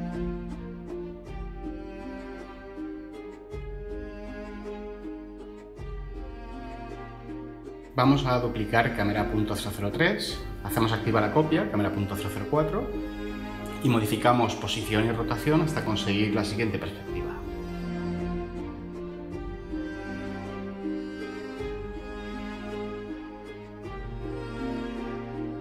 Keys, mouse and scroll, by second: 9.4 shift+d, 10.1 ↻.